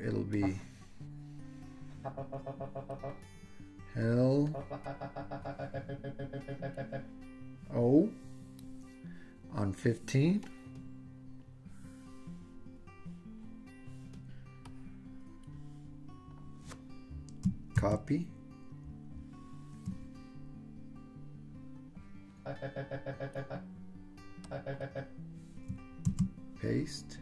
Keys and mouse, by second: 0.5-3.1 drag, 4.6-7.0 drag, 10.6 click, 14.8-16.4 drag, 17.8 super+c, 22.5 click, 23.0 click, 24.6 click, 26.1 super+v.